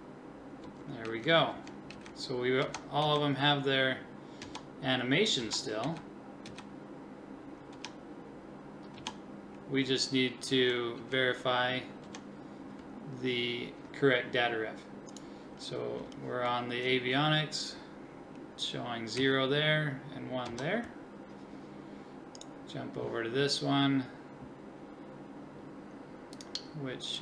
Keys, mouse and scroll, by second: 0.6 Left, 1.1 Right, 1.5 Left, 1.9 Right, 2.6 Left, 3.0 Right, 4.4 Left, 5.4 Left, 5.8 Right, 6.5 Right, 7.7 Left, 9.0 Left, 10.5 Right, 11.0 Right, 12.1 Left, 16.8-19.2 drag, 19.2 Right, 20.5 Left, 22.5 click.